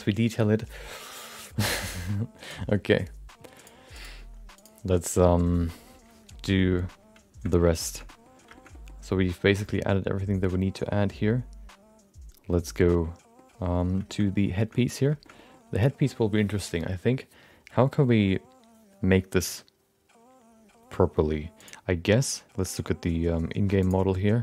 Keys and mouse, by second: 2.4-3.7 drag, 4.0-6.1 drag, 7.4 middle click, 7.7 shift+middle click, 8.0 middle click, 8.5 shift+middle click, 8.7 middle click, 10.2 middle click, 11.0 middle click, 12.8 middle click, 14.0 shift+middle click, 14.2 middle click, 14.7 middle click, 15.2 middle click, 21.5-23.1 drag, 23.8 click.